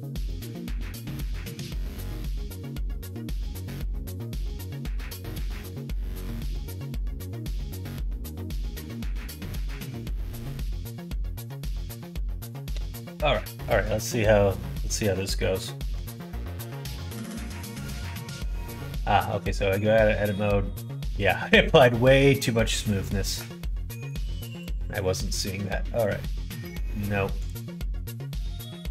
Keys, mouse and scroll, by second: 0.0 middle click, 1.0 middle click, 5.5 click, 6.1-8.6 middle drag, 9.0 middle click, 13.6 middle click, 14.0 middle click, 14.5 shift+middle click, 14.9 middle click, 15.3 middle click, 15.9 Tab, 16.5 middle click, 16.9 Tab, 17.4 middle click, 18.5 Tab, 19.2 middle click, 20.0 middle click, 21.5 middle click, 23.0-25.1 drag, 25.6 middle click, 27.4-28.9 drag.